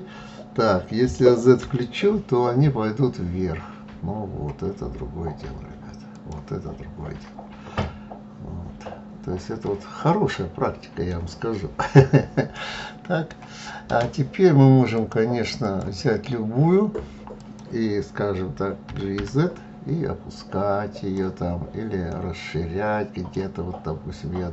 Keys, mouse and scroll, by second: 7.2-10.2 middle drag, 11.9-14.4 middle drag, 14.4 click, 15.0 click, 16.8 click, 21.5-24.1 middle drag, 24.1 click.